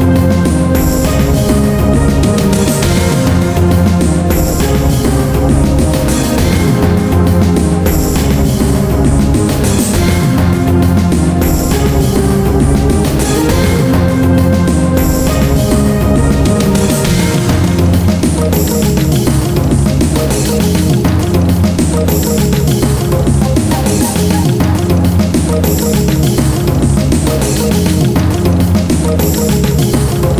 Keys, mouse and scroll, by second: 0.9 click, 1.2 middle click, 1.3 scroll up 1, 1.7 shift+middle click, 2.1 scroll up 1, 2.4 middle click, 4.7 scroll down 1, 4.9-6.7 middle drag, 6.9 Tab, 7.6-8.8 typing, 10.3 Tab, 11.3 click, 11.9 Tab, 12.1 middle click, 12.8 shift+middle click, 14.1 click, 18.3 middle click, 18.6 Tab, 18.9-20.4 middle drag, 20.4 z, 21.0 middle click, 21.2 Tab, 22.1 middle click, 24.0 middle click, 27.0 middle click, 27.7 ctrl+alt+right click, 28.1 middle click.